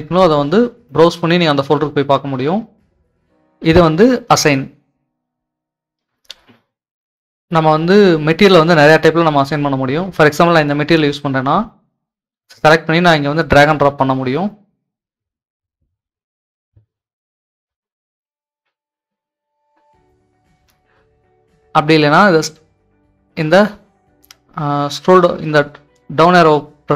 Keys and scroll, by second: 18.0 s, 18.6 w, 19.1 w, 19.5 w, 21.9 typing.